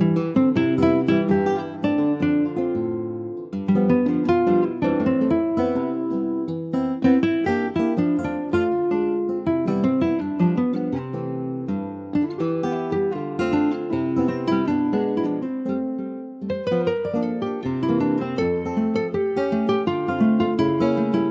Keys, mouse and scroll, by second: 0.0-0.4 scroll up 1, 0.4 middle click, 0.9 click, 2.5 ctrl+r, 4.1 4, 4.2 click, 5.5 3, 5.7 click, 7.1 shift+click, 7.5 middle click, 8.4 shift+d, 9.1 middle click, 9.8 e, 11.8 middle click, 12.5 Tab, 12.9 click, 13.3 middle click, 13.8 Tab, 14.2-15.5 middle drag, 15.5 Tab, 16.0 Tab, 16.3 click, 16.7 l, 17.3-18.3 middle drag, 18.6 alt+x, 18.8 alt+middle click, 19.2 alt+x, 19.5-20.4 scroll up 2, 20.4 alt+z, 21.0 shift+middle click.